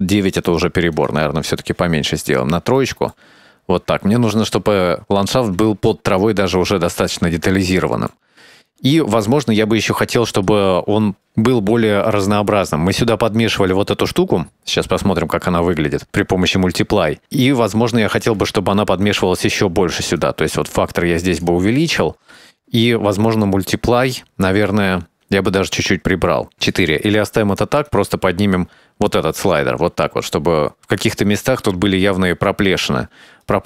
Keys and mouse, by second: 0.4 shift+middle click, 1.8 click, 3.0 shift+middle drag, 4.3 shift+middle click, 7.8-8.3 shift+middle drag, 9.0 middle click, 9.5 middle click, 13.4 shift+middle click, 13.8 ctrl+middle click, 14.3 ctrl+shift+click, 18.0 middle click, 19.3 ctrl+shift+click, 20.3-21.9 drag, 21.9 middle click, 25.1-27.4 drag, 28.2-31.4 drag, 33.5 shift+middle drag.